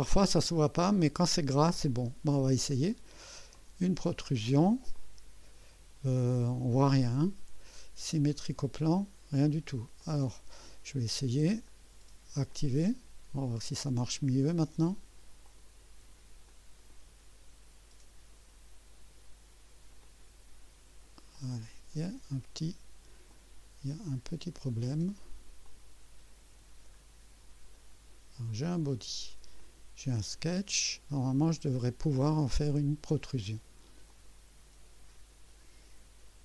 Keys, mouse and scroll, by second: 3.5 click, 5.0-6.9 drag, 8.8 click, 10.0 click, 11.7 right click, 12.5 click, 15.4 click, 16.5-18.5 drag, 20.0 click, 21.3 click, 22.1 scroll down 1, 23.3-25.4 drag, 25.6 click, 27.0 scroll up 1, 27.7-28.2 right drag, 29.6 click, 34.1 click.